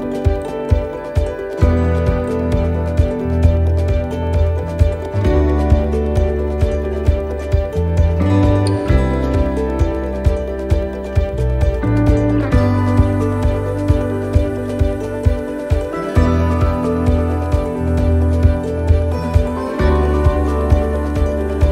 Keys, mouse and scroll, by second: 0.4 right click, 1.5 l, 5.4 click, 9.1 click, 10.3 shift+middle click, 10.8 scroll down 4, 11.6 scroll down 2, 12.4 right click, 13.6 right click, 14.3 shift+right click, 14.3 shift+right click, 15.1 shift+d, 17.1 click.